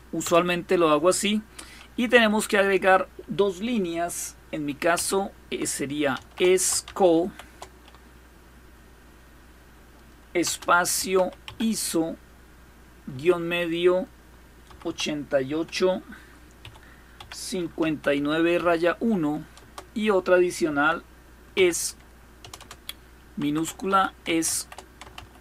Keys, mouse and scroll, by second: 1.7 typing, 4.6 typing, 5.8-6.8 typing, 10.1-11.7 typing, 12.7 typing, 14.3-15.2 typing, 16.2-18.2 typing, 19.2 Return, 20.0-22.0 typing, 23.1-25.4 typing.